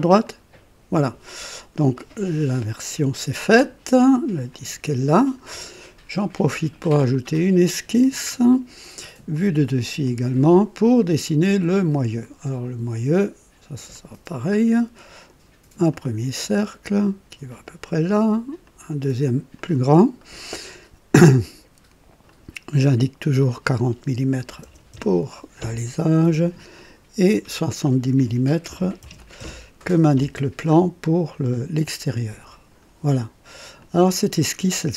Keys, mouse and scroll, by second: 0.2 click, 1.4-2.2 right drag, 4.5 click, 7.1 click, 9.3 click, 10.0 click, 11.1 scroll up 1, 11.6 right click, 13.9 click, 14.5 scroll up 1, 15.9 click, 17.4 click, 18.6 click, 19.5 click, 20.2 right click, 22.2 click, 23.4 click, 24.4 KP_4, 24.6 KP_0, 24.9 Return, 26.7 click, 27.8 click, 28.7 KP_7, 29.0 KP_0, 29.3 Return, 29.5 Return, 30.6-30.9 scroll up 1, 32.0-33.0 drag, 33.8 click, 34.5-34.8 scroll down 1.